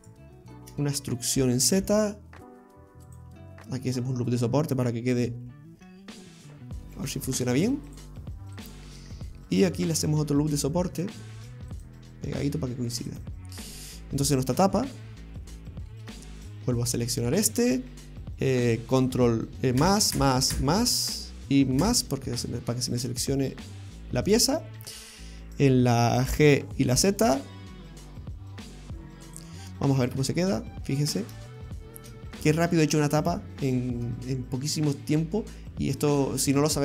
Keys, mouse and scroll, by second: 0.0 alt+shift+right click, 1.5 e, 3.7-4.1 scroll up 1, 5.3 ctrl+g, 7.0 ctrl+r, 9.0 middle click, 9.7 middle click, 11.4 ctrl+r, 13.7 scroll down 1, 15.0 middle click, 15.0 scroll up 1, 15.7 shift+middle click, 16.3 middle click, 17.4 right click, 19.8 ctrl+KP_Add, 20.2 ctrl+KP_Add, 20.6 ctrl+KP_Add, 21.8 ctrl+KP_Add, 22.8 scroll down 2, 23.2 middle click, 24.1-24.6 scroll up 2, 24.6 shift+middle click, 26.3 g, 30.2 Tab, 30.7 middle click, 31.7 shift+middle click, 32.5 middle click, 36.6 shift+middle click.